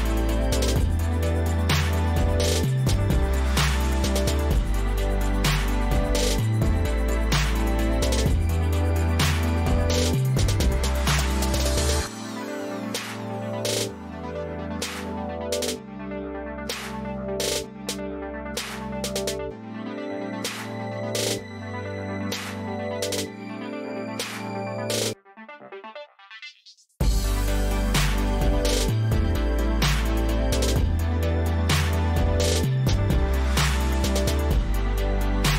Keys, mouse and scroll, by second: 3.7 click, 6.5-7.5 drag, 8.0-9.0 drag, 9.3-10.3 drag, 11.5 click, 15.7 click, 16.3 click, 17.2 click, 29.5 click, 30.7-31.8 drag, 32.2-33.2 drag, 34.4 click.